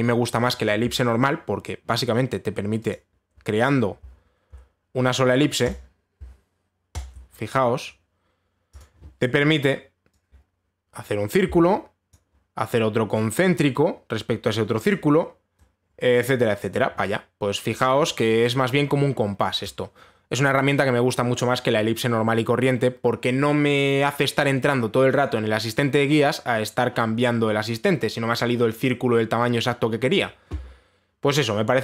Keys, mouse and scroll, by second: 1.3 click, 3.5 click, 6.3 click, 7.6 shift+click, 9.4 click, 10.3 click, 12.7 click, 15.5 click, 17.2 click, 20.3 click.